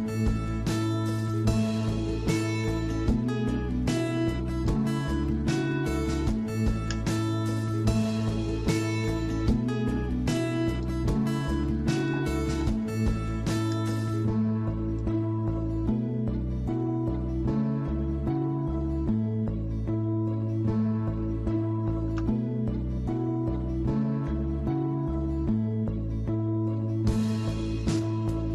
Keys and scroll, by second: 9.8 Escape, 24.3 alt+Tab.